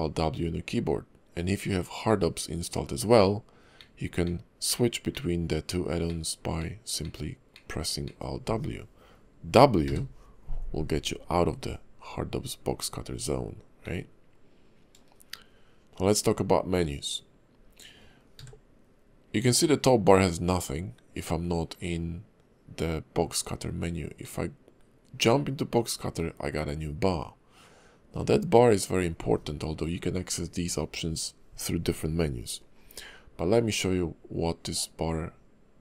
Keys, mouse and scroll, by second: 3.8 alt+w, 4.2 alt+w, 4.6 alt+w, 5.1 alt+w, 5.7 alt+w, 6.0 alt+w, 6.6 alt+w, 7.0 alt+w, 7.5 alt+w, 8.0 alt+w, 9.8 w, 13.8 alt+w, 18.3 w, 24.2 alt+w.